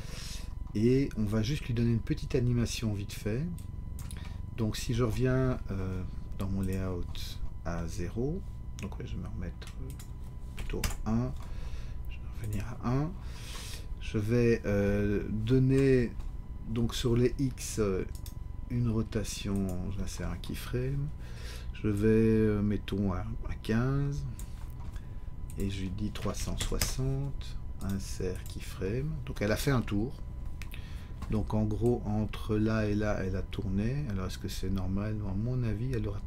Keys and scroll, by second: 10.5 1, 10.8 Return, 26.2 3, 26.4 6, 26.6 0, 26.8 Return.